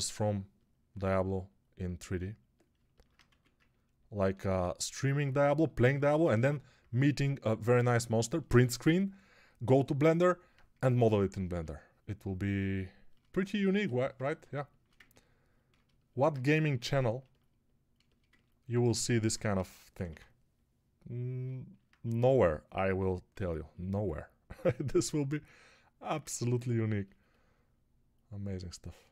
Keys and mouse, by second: 3.1 1, 19.4 g, 19.8 ], 19.9 ].